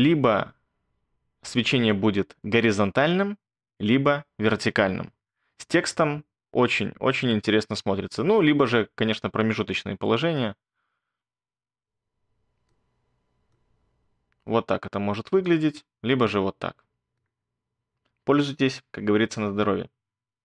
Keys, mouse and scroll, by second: 19.3-20.4 alt+scroll.